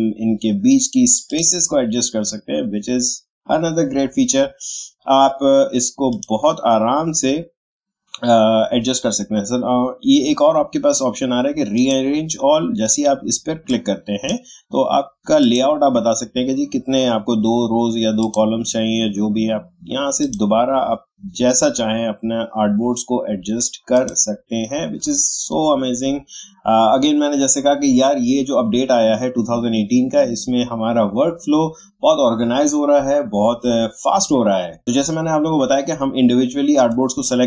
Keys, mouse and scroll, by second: 6.1 click, 11.7-15.4 drag, 18.2 click, 23.9 click, 34.8 click.